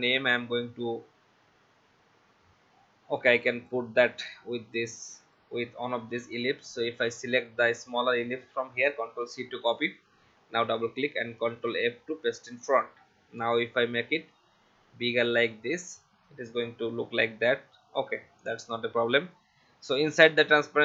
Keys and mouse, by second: 5.2 click, 7.4 click, 9.2 ctrl+c, 9.8 click, 11.5 ctrl+f, 14.4 alt+shift+click, 20.3 click.